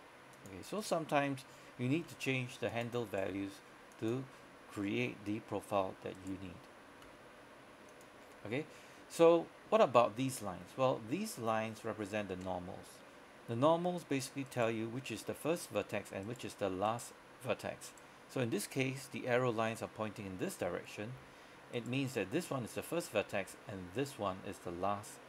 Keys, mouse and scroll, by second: 0.4 click, 0.9 right click, 2.1 g, 2.8 click, 3.2 right click, 3.4 g, 4.0 click, 6.2 right click, 7.1 g, 8.0 click, 8.3-8.8 scroll down 1, 8.8-10.6 scroll up 1, 14.5 right click.